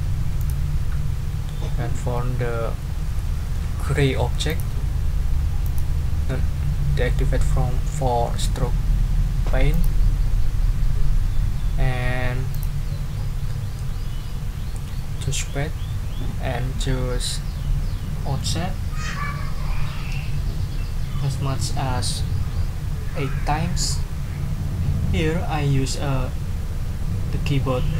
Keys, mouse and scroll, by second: 0.4 click, 4.5 click, 5.6 click, 9.7 click, 12.5 click.